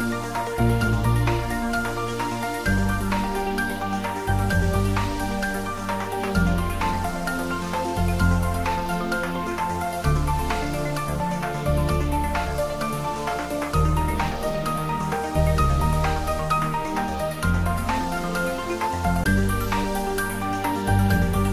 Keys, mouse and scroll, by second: 0.6-1.8 typing, 2.0 Return, 3.1 scroll up 1, 6.2 click, 7.2-10.0 drag, 14.8-15.3 scroll up 1, 15.3-16.3 scroll down 1, 16.3 middle click, 17.4 scroll up 1, 18.7-21.4 middle drag, 21.4-21.5 scroll down 1.